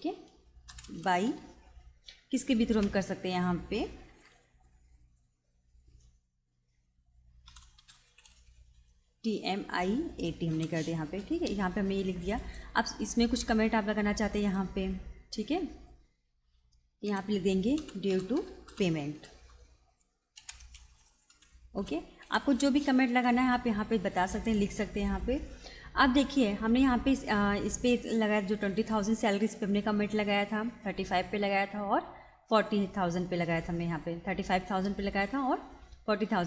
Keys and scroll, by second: 0.0-1.4 typing, 7.2-8.8 typing, 10.5 t, 17.0-22.9 typing.